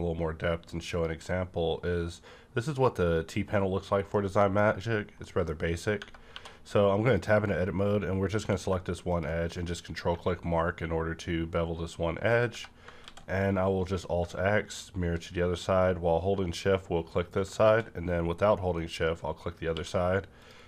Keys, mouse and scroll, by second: 0.8 click, 4.0 middle click, 4.2 middle click, 4.2 click, 4.7 scroll up 1, 5.1 middle click, 6.0 Tab, 6.2 2, 7.0 click, 8.3 click, 8.4 q, 9.0 click, 9.7-10.3 scroll up 3, 10.1 1, 10.7-12.3 scroll up 2, 12.3 click, 12.5 Tab, 12.9 alt+x, 14.7 shift+click, 18.7 shift+click, 19.6 q, 20.4 click.